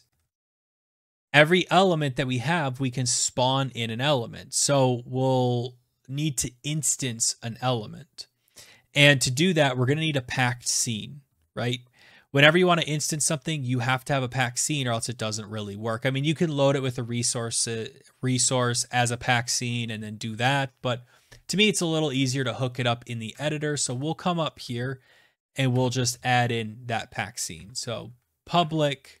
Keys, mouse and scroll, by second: 0.0 Down, 13.0-19.3 scroll, 21.9 click, 23.1 Tab, 23.7 Return, 25.5 shift+Tab, 25.9 typing, 27.1-29.2 typing.